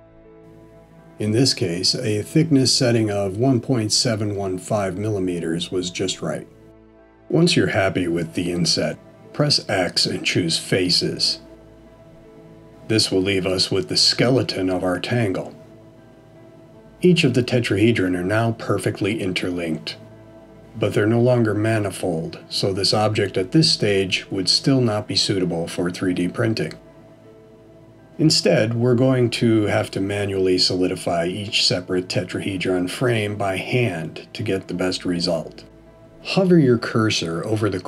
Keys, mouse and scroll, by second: 6.3-7.0 scroll down 3, 7.0 middle click, 8.5-9.2 scroll down 1, 12.2 x, 15.2 middle click, 20.8 scroll down 1, 21.8 middle click, 34.0 middle click.